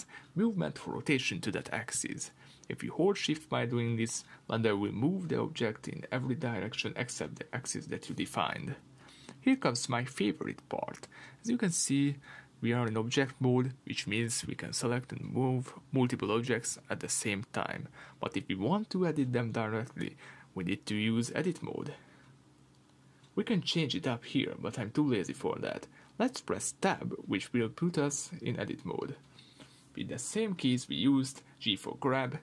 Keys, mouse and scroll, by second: 0.6 Escape, 0.9 r, 3.1 Escape, 3.4 r, 5.6 Escape, 5.9-13.5 middle drag, 5.9 r, 8.1 Escape, 8.4 r, 10.7 Escape, 11.0 r, 11.7 Escape, 13.5-32.4 drag, 26.3 Tab.